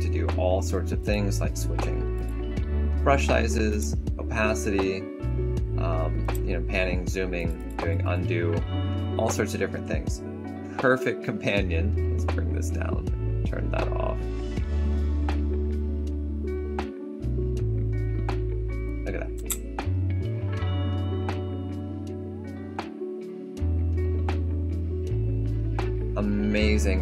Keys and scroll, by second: 6.1 space, 7.3 ctrl+z, 19.3 4.